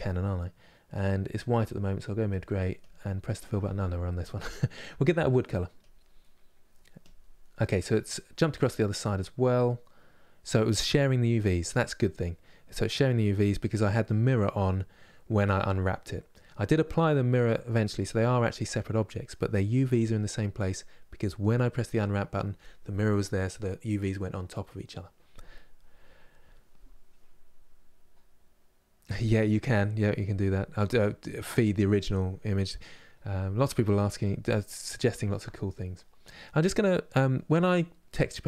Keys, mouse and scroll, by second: 5.5-7.1 drag, 7.1-38.4 middle drag.